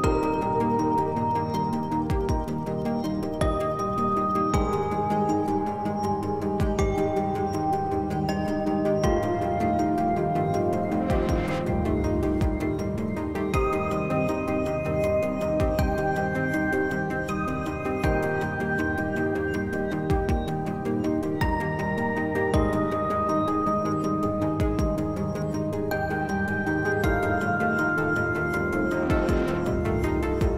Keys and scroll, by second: 0.1 s, 4.1 s, 14.5 s, 15.9 s.